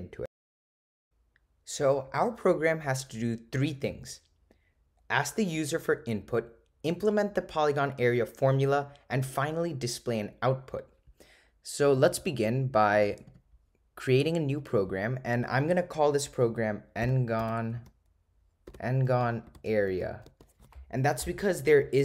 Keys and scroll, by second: 13.0 Right, 13.3 Right, 14.6 Return, 17.9 7.